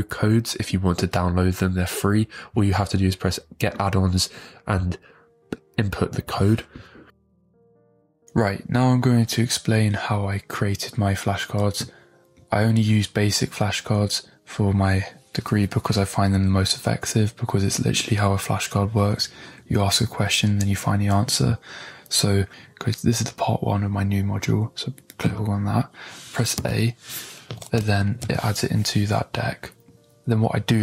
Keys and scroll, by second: 22.5 d, 26.5 a, 28.0 ctrl+Home.